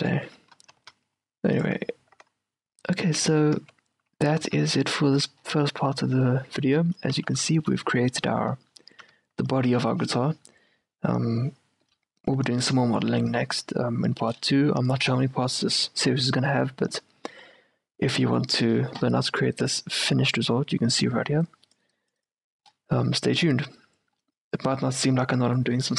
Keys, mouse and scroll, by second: 0.2-0.5 scroll up 1, 0.4 q, 0.5-3.1 right drag, 1.0 ctrl+r, 3.7 Tab, 4.6 z, 4.9-11.8 middle drag, 7.3 z, 8.3 a, 12.0-20.5 middle drag.